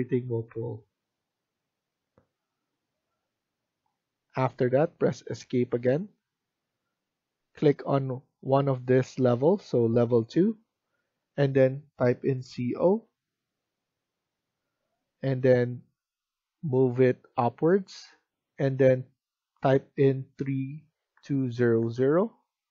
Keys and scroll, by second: 2.9 Escape, 12.4-12.8 typing, 19.9-21.1 typing, 22.5 Return.